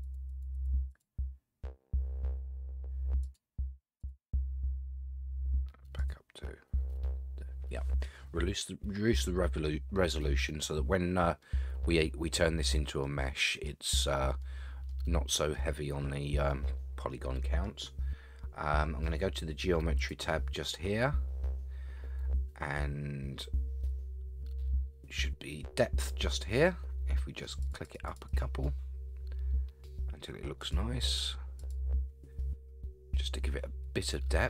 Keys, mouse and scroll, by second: 0.0 click, 0.3 click, 0.5 click, 0.9 click, 3.2 click, 4.0 click, 6.0 click, 11.4-13.0 middle drag, 13.4 middle click, 14.4-14.9 middle drag, 15.0-15.5 scroll up 2, 15.5-17.6 middle drag, 20.0 click, 27.6 click, 27.8 click, 28.1 click, 28.3 click, 30.6 click, 31.6 click, 32.4-34.4 middle drag.